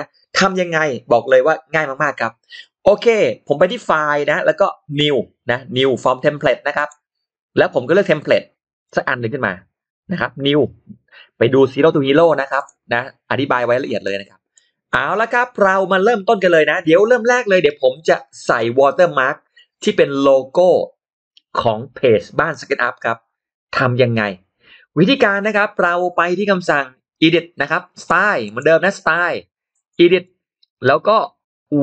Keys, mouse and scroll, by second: 3.5 click, 6.6 click, 8.7 click, 12.4 click, 13.7-14.4 scroll down 2, 14.4 middle click, 15.0-15.6 scroll up 1, 27.8 click, 28.3 click, 29.9 click.